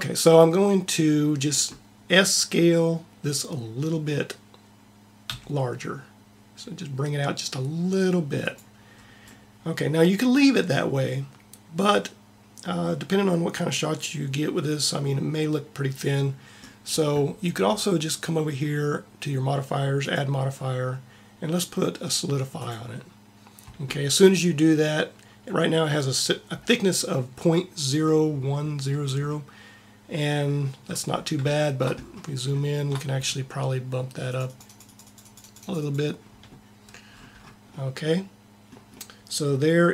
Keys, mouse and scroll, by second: 5.1 s, 19.8-21.6 drag, 29.2 middle click, 30.3 middle click, 30.8 middle click, 32.5-34.2 middle drag, 34.2-37.5 drag, 37.5 middle click.